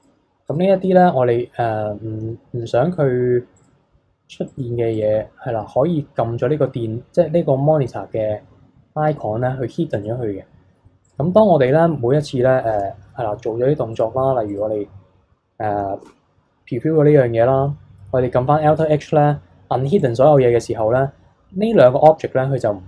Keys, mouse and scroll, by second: 0.4 click, 3.6 click, 4.5 click, 10.0 click, 11.0 click, 12.7 a, 13.9 click, 14.5 click, 16.0 shift+h, 18.7 alt+h, 20.0 click.